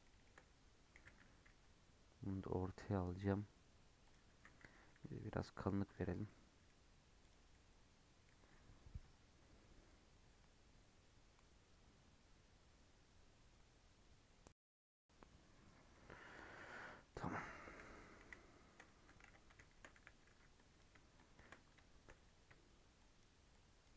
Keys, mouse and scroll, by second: 0.0-0.4 shift+middle drag, 0.4-0.9 scroll down 1, 0.9 g, 4.3 s, 6.0 scroll down 6, 6.2-6.7 middle drag, 6.7 scroll down 5, 7.1 click, 7.4-10.6 middle drag, 16.7-17.1 middle drag, 17.1-17.7 scroll up 4, 17.3-17.6 middle drag, 18.1 KP_1, 18.4-18.9 scroll down 6, 18.9 Tab, 19.2 alt+z, 19.4-19.9 scroll up 3, 19.9 1, 20.2 2, 20.5 click, 22.9 shift+click, 23.4 shift+click.